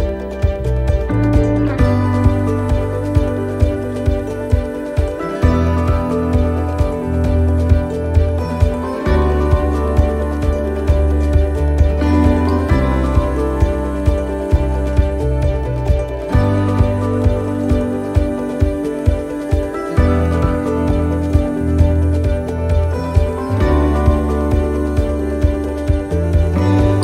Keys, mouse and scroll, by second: 0.0 middle click, 0.2 shift+middle click, 0.2 shift+middle click, 1.0 middle click, 4.1 alt+shift+right click, 5.1 middle click, 7.0 middle click, 7.8 shift+middle click, 7.8 shift+middle click, 10.1 middle click, 11.5 alt+shift+right click, 13.1 alt+shift+right click, 13.3 middle click, 15.0 middle click, 15.4 alt+shift+right click, 16.7 alt+shift+right click, 16.9 middle click, 18.7 middle click, 19.1 alt+shift+right click, 19.8 middle click, 21.0 alt+shift+right click, 21.5 middle click, 22.0-22.5 scroll down 2, 22.5 middle click, 23.5 alt+shift+right click, 25.0 alt+shift+right click, 25.3 middle click, 26.6 scroll up 2.